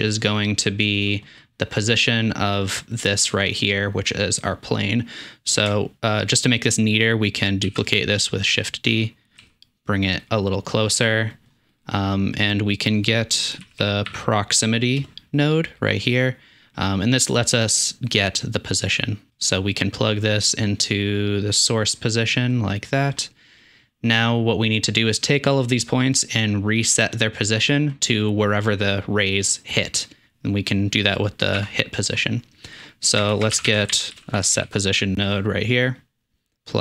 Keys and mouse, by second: 4.9-11.7 drag, 7.7 shift+d, 9.4 g, 11.8-12.4 drag, 15.9 drag, 19.7-20.2 drag, 31.9-33.1 drag, 33.2 shift+click, 33.3 shift+a, 33.7 s, 36.0 click, 36.5-36.8 drag.